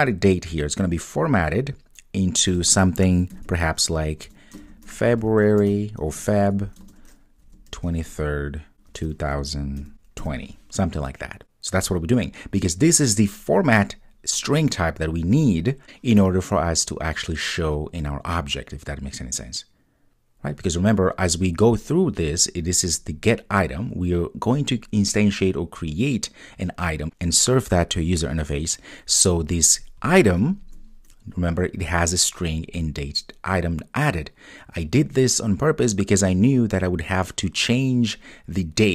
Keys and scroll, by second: 30.6 super+b.